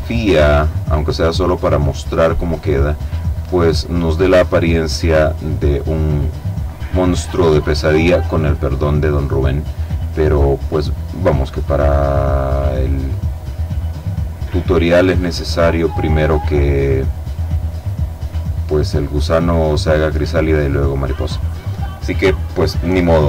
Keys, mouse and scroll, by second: 0.7 click, 1.4 click, 3.0 click, 3.8 click, 8.6 click, 11.1 click, 12.4 click, 13.2 click, 15.4 click, 20.6-23.2 middle drag.